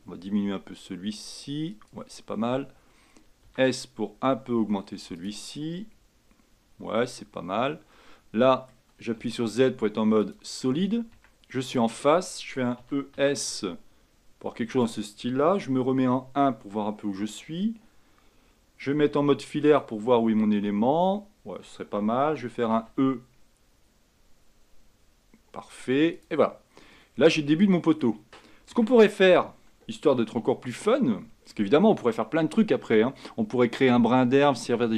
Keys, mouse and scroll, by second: 3.6 s, 8.1-10.5 middle drag, 10.5 z, 11.3 Tab, 11.9 click, 12.9 e, 16.1 KP_1, 20.0 z, 22.9 e, 27.2-27.6 scroll down 6, 27.6-28.9 middle drag, 28.9 Tab, 29.1-30.4 scroll up 4, 30.4-31.9 shift+middle drag, 31.9-32.7 scroll down 4, 32.7-34.9 middle drag.